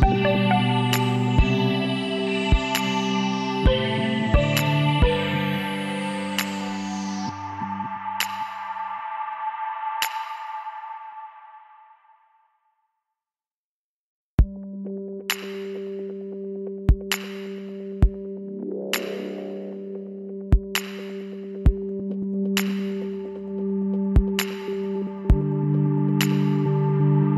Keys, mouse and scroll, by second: 3.1-4.9 middle drag, 5.7-7.2 middle drag, 7.2-9.0 right drag, 9.0 middle click, 10.4 middle click, 11.2-12.5 middle drag, 12.7-14.5 middle drag, 14.3 z, 15.8-18.4 middle drag, 18.8 middle click, 19.3 KP_3, 20.0 middle click, 22.5 middle click, 23.3-24.6 drag, 24.6 middle click, 25.2-27.3 right drag.